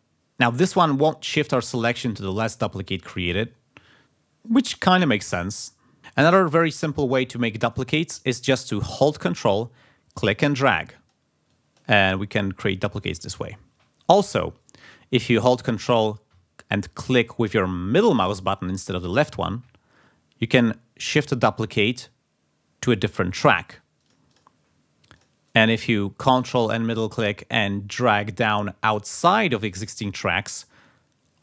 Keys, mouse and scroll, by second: 6.5 click, 7.1 ctrl+scroll up 2, 10.1-11.2 ctrl+drag, 11.5-13.1 ctrl+drag, 13.8-14.1 scroll down 2, 14.1 scroll up 2, 19.4-22.5 ctrl+drag, 22.5-23.6 ctrl+middle drag, 24.0 ctrl+click, 25.1 click, 25.9 scroll down 2, 26.7-30.6 ctrl+middle drag.